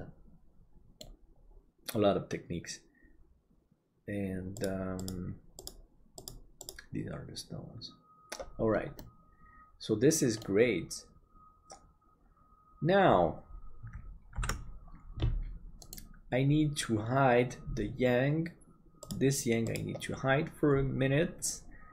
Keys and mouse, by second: 9.0-13.2 middle drag, 14.6 ctrl+s.